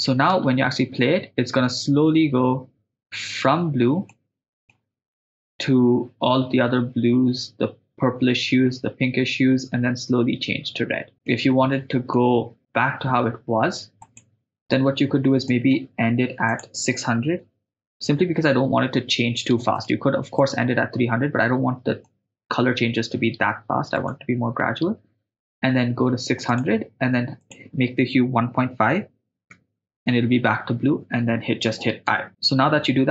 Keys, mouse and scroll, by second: 0.4 shift+space, 4.1-4.7 middle drag, 11.1 shift+space, 11.3-12.2 middle drag, 14.2 click, 15.5 middle click, 16.5-17.5 drag, 17.9 click, 18.1 0, 19.8 middle click, 20.4 middle click, 22.1-22.7 ctrl+middle drag, 24.0 right click, 26.6-27.0 drag, 27.4-30.5 drag, 32.2 i.